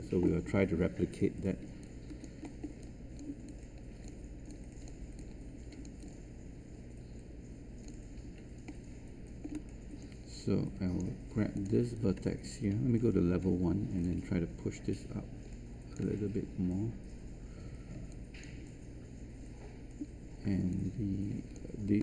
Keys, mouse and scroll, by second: 1.8 alt+click, 2.4 alt+middle click, 2.8 alt+click, 3.4 alt+click, 4.4 alt+click, 5.1 alt+click, 6.7-7.8 alt+drag, 8.6 alt+middle click, 9.9 right click, 11.5 click, 13.0 1, 14.0 ctrl+shift+click, 20.8 alt+click.